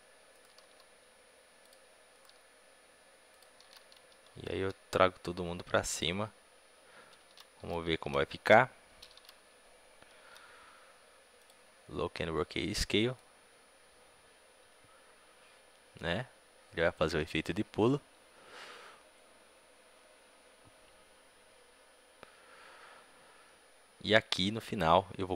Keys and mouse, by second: 0.5 r, 2.1-3.2 drag, 2.2 r, 3.5-5.1 drag, 3.5 right click, 3.5 a, 3.7 a, 4.4 g, 7.2 click, 7.2 a, 7.5 a, 7.8 a, 9.0 a, 11.3 i, 13.1-25.3 drag.